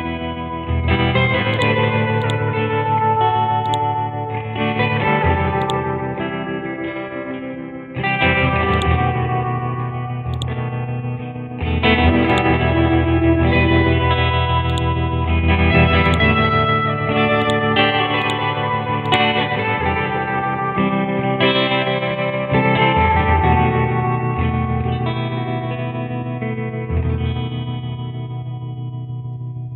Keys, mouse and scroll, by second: 9.1 scroll up 1, 10.3 shift+click, 12.3-13.2 click, 13.7 Return, 14.7 click, 16.7 scroll down 1, 17.4 click, 19.7 click.